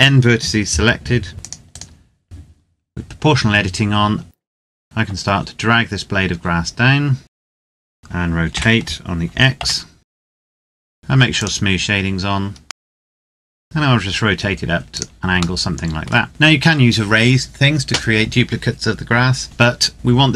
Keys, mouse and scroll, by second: 1.3 click, 1.4 right click, 2.2 click, 2.4-4.2 scroll down 1, 4.3 click, 4.6-7.4 scroll down 1, 7.4-7.8 scroll up 1, 7.8 scroll down 1, 8.2 r, 9.4 x, 10.0 click, 10.1 r, 10.2 scroll down 1, 10.3 click, 10.6 Tab, 10.7 middle click, 10.8 Tab, 10.9 z, 11.1 click, 12.7 middle click, 12.8 click, 13.0 KP_7, 13.2 KP_3, 13.4 scroll down 1, 13.6 r, 14.7 click, 15.4 shift+middle click, 16.2 scroll up 1, 16.3 middle click, 19.9 KP_7.